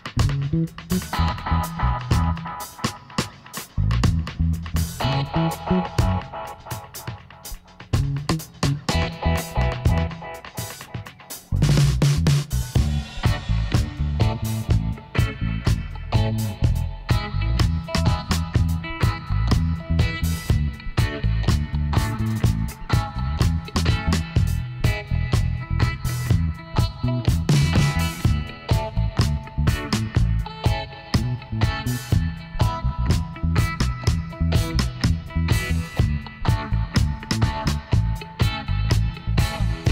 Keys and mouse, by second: 1.1 KP_7, 2.7 z, 3.9 ctrl+r, 6.6 click, 7.3-8.4 right drag, 7.4 b, 8.9 g, 12.1-13.9 right drag, 13.1 b, 14.5 g, 20.8 g, 25.9-28.3 middle drag, 28.3-29.8 right drag, 29.1 b, 30.6 g, 33.1-34.3 middle drag, 34.3 b, 36.1 e, 38.1 s.